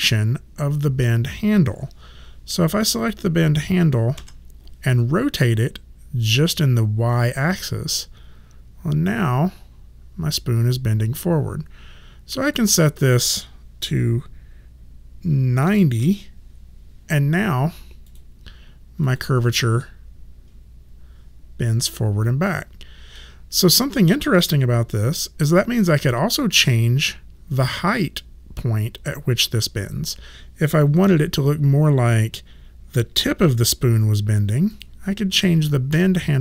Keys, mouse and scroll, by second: 3.0 click, 4.2 e, 7.1 click, 12.5 click, 15.6 KP_9, 15.7 KP_0, 16.0 Return, 16.0 KP_Enter, 18.1 click, 19.8 middle click, 34.7 click, 35.9 w.